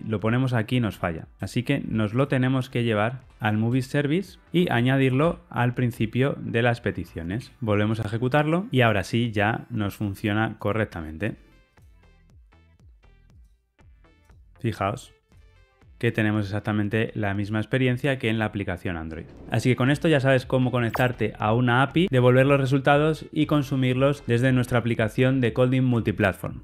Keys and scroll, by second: 4.5 super+z, 7.9 shift+F10, 8.1 ctrl+r.